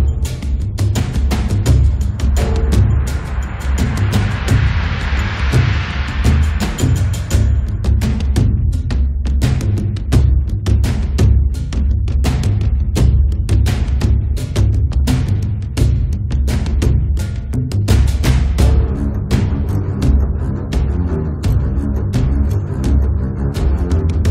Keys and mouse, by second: 1.3-2.9 middle drag, 2.9 click, 3.5-4.6 middle drag, 3.5 s, 4.4 s, 5.1 middle click, 5.4 ctrl+a, 7.2 s, 8.1 s, 10.3 click, 11.1 click, 11.5 f, 11.8 1, 12.1 middle click, 12.5 f, 12.6 click, 13.7-14.9 drag, 14.9 middle click, 16.4-21.2 drag, 21.2 ctrl+KP_7, 21.3 click, 21.8-24.3 drag, 22.3 middle click.